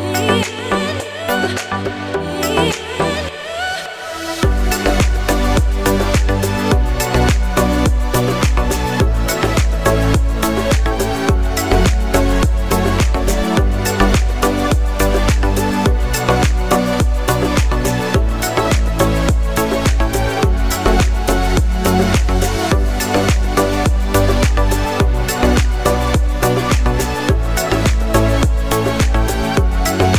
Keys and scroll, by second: 28.1 Up, 28.5 Up, 28.5 Left, 29.0 Up, 29.1 Up, 29.4 Up, 29.8 Left, 29.9 Left.